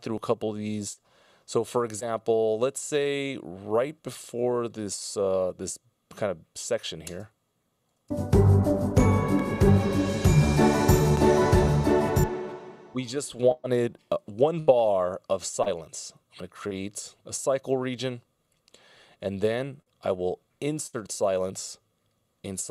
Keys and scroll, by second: 7.6 space, 11.1 space, 14.2 F16, 14.5 Delete.